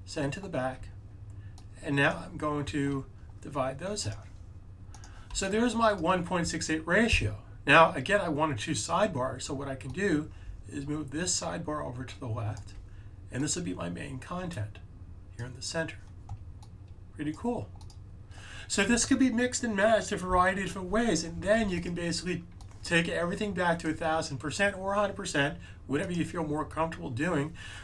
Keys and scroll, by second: 0.7 super+z.